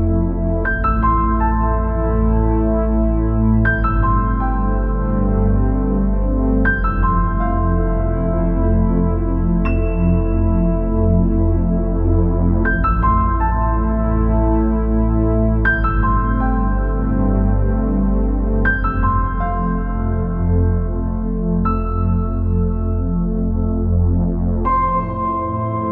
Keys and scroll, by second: 24.5 space.